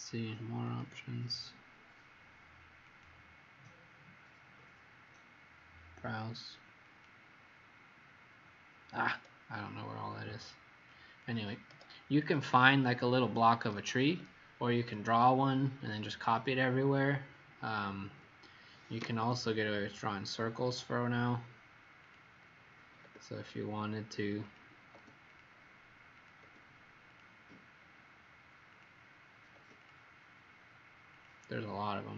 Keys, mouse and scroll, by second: 17.3 scroll up 2, 18.6-19.4 typing, 20.6 click, 23.3 click, 24.4 click, 25.2 click, 26.1 click, 27.0 click, 28.7 click, 31.1 click.